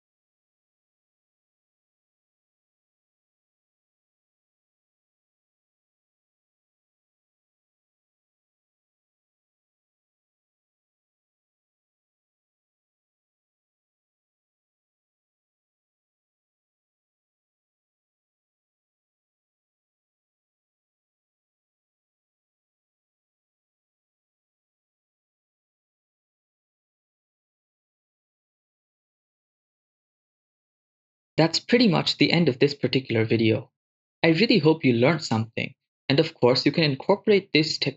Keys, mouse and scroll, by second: 1.0 shift+space, 2.0 shift+space, 2.4 ctrl+middle click, 2.7 shift+space, 3.6 shift+space, 3.6 right click, 4.1 click, 4.4 click, 4.9 click, 5.5-6.7 drag, 7.0 click, 7.0 right click, 7.6 click, 8.7 shift+space, 10.0 shift+space, 11.8 shift+space, 13.1 shift+space, 13.5 click, 13.7 shift+a, 14.8 ctrl+1, 14.9-15.6 typing, 15.0 click, 16.0 click, 16.7-17.7 typing, 17.1 click, 18.0 click, 18.7 right click, 18.9 click, 20.1 right click, 20.6 click, 20.8 click, 22.7 right click, 23.9 click, 24.7 click, 24.7 right click, 24.9 scroll down 1, 25.7 right click, 25.9 right click, 26.0 shift+space, 32.2 shift+space.